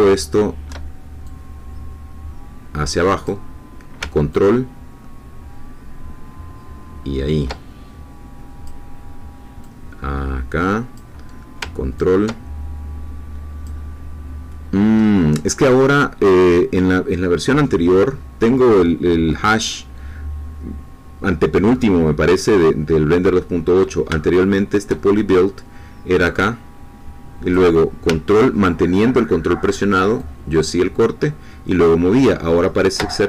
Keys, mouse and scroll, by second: 1.2-3.4 drag, 4.3-8.8 ctrl+drag, 9.6-11.1 drag, 12.0-13.8 ctrl+drag, 14.2-15.0 scroll down 2, 15.0-18.7 scroll up 2, 18.7-23.5 scroll up 1, 23.5 middle click, 24.4 shift+middle click, 26.2-27.8 drag, 30.2-33.2 ctrl+drag.